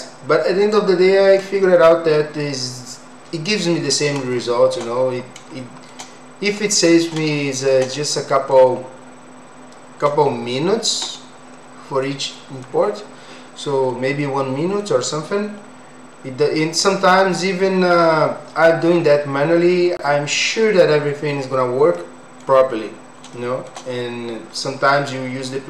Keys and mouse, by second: 0.7 click, 4.3 shift+middle click, 5.6 shift+middle click, 7.4 shift+middle click, 8.1 middle click, 10.3 shift+middle click, 12.1 middle click, 14.2 middle click, 21.9 middle click, 23.3 shift+middle click.